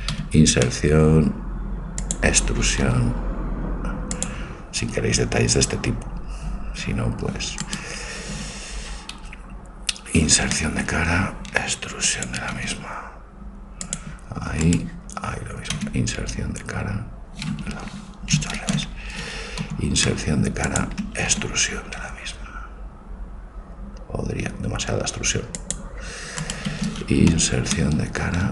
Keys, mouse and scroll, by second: 0.3 i, 2.9 e, 4.3 e, 7.7-10.2 right drag, 10.2 i, 12.6 e, 14.7-16.6 right drag, 16.0 e, 18.7 ctrl+z, 19.7 i, 21.5 e, 26.5-28.3 right drag, 27.4 i.